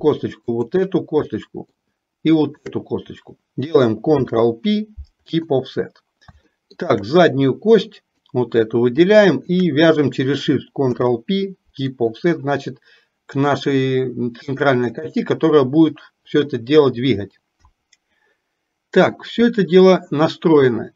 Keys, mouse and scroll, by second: 0.6 shift+click, 1.4 shift+middle click, 2.6 shift+click, 6.5 shift+middle click, 8.0 click, 9.4 shift+click.